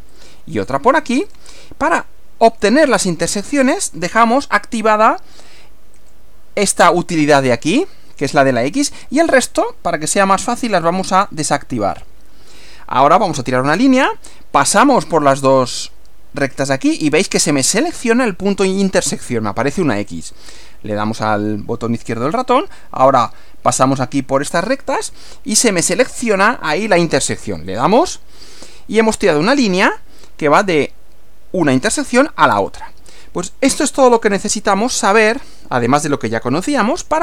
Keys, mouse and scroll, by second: 0.1 click, 1.3 click, 1.9 click, 4.2 click, 5.9 click, 10.7 click, 11.5 click, 13.2 click, 20.1 click, 27.7 click, 28.5 click, 29.9 click, 33.9 click, 35.1 scroll down 1.